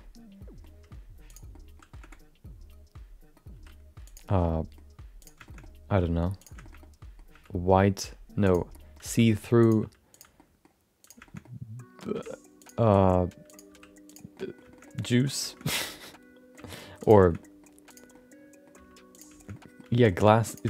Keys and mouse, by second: 0.7 g, 1.5 middle click, 1.9 middle click, 2.1-3.3 middle drag, 3.5 r, 4.3 middle click, 5.2 click, 5.5 shift+middle click, 6.4 click, 6.6 shift+middle click, 6.8 middle click, 7.3 g, 8.7 middle click, 9.0 r, 9.8 g, 10.3 middle click, 11.0 click, 11.2 shift+middle click, 11.4 middle click, 12.1 g, 12.8 r, 13.7 g, 14.3 middle click, 14.7 shift+middle click, 14.8 middle click, 15.3 click, 15.5 shift+middle click, 15.9 shift+middle click, 16.1 middle click, 16.6 g, 17.2 shift+middle click, 17.4 middle click, 17.9 click, 18.1 middle click, 18.7 g, 19.5 middle click, 20.1 middle click, 20.5 click.